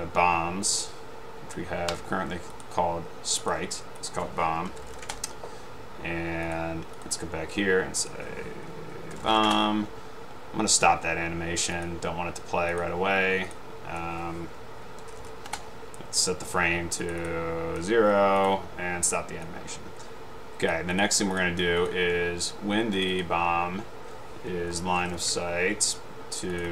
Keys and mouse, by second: 3.5 click, 4.6-5.4 typing, 6.6 drag, 8.1 click, 9.0-9.8 typing, 11.9 click, 13.6-13.9 drag, 15.0-15.8 typing, 19.9-20.9 drag, 21.4 click, 21.9-22.4 drag, 23.2-23.6 drag, 24.7-25.7 typing, 26.6 click.